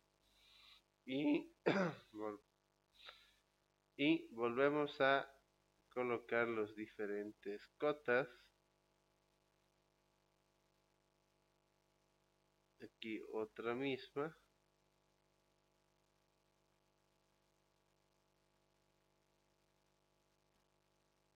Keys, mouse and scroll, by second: 4.1 click, 7.1 click, 10.4 click, 12.4 click, 18.5 click, 20.5 click.